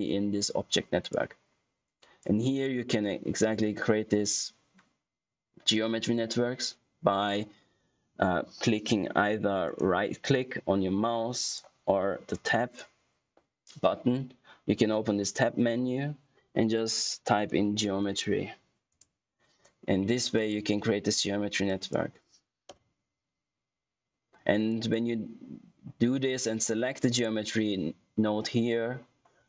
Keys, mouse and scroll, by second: 0.9 click, 10.4 right click, 11.4 click, 12.5 Tab, 17.0-18.4 typing, 18.8 Return, 20.3 click, 24.9 click, 26.8 click.